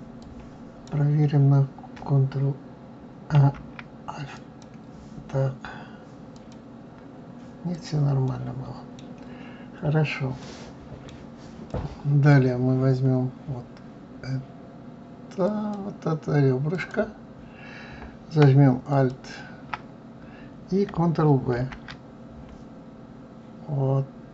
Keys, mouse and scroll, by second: 0.2 click, 3.4 alt+m, 6.3 click, 7.7 click, 8.3-12.8 middle drag, 12.8-15.5 scroll up 3, 15.5 click, 16.7 click, 18.9 alt+click, 20.1-21.1 scroll up 1, 21.6 ctrl+b.